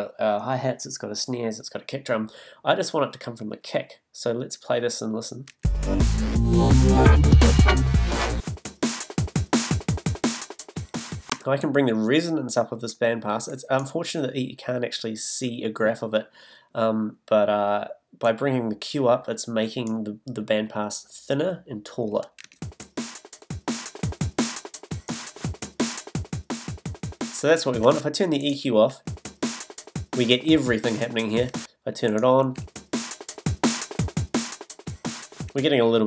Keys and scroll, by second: 5.5 space, 11.3 space, 22.4 space, 27.8 space, 31.5 space, 35.5 space.